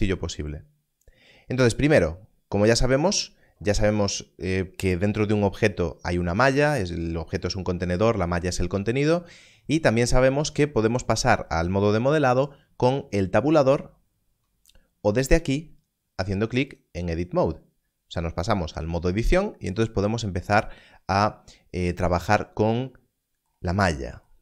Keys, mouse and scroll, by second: 13.3-14.2 scroll, 14.2 Tab, 15.3 click.